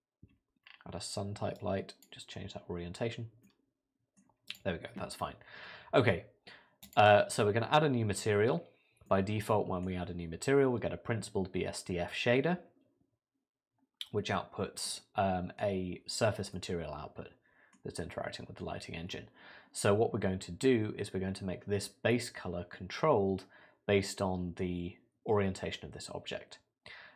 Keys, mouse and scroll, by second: 0.3-1.3 scroll down 4, 1.6 click, 2.4-3.4 scroll up 6, 3.4 middle click, 4.5 click, 6.8 click, 8.6 scroll down 1, 9.1 middle click, 11.6 middle click, 14.9 middle click, 16.5 middle click.